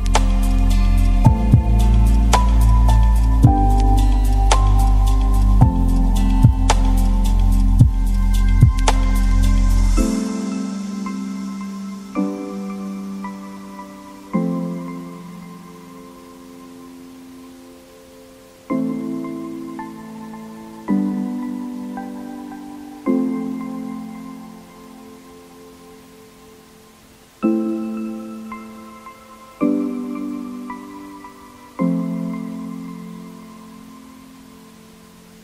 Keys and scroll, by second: 33.2 Caps_Lock, 33.3-34.5 typing.